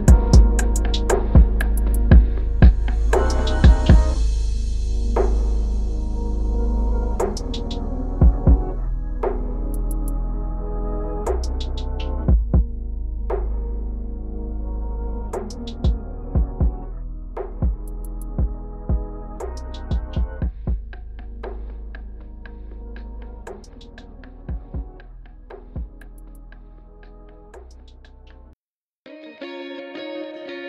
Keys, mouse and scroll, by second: 3.2 ctrl+=, 4.0 ctrl+=, 4.3 ctrl+=, 5.2 ctrl+=, 5.7 space, 19.0 double click, 21.7 double click, 22.1 space, 23.2 double click, 24.3 double click, 24.5 space, 27.1 double click, 28.1 space.